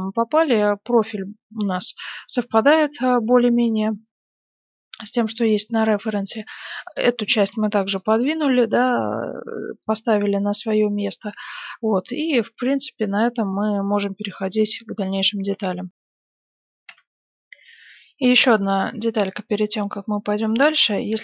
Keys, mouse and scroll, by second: 3.6-7.5 middle drag, 3.6-4.5 scroll up 1, 6.7-8.5 drag, 7.5 z, 7.9-12.3 middle drag, 12.9-15.8 middle drag, 16.7 F10, 16.8 F9, 19.7-21.2 middle drag.